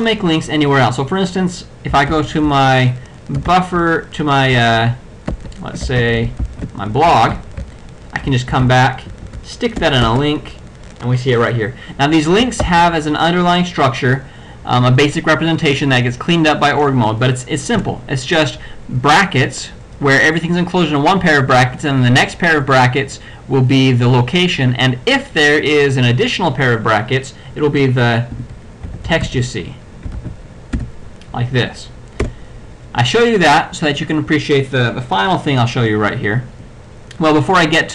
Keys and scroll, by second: 2.2 l, 7.7 j, 8.6 c, 9.2 y, 9.9 Return, 12.7 ctrl+e, 17.8 BackSpace, 28.2-29.7 typing, 30.3 ctrl+f, 30.8 ctrl+], 32.3 BackSpace.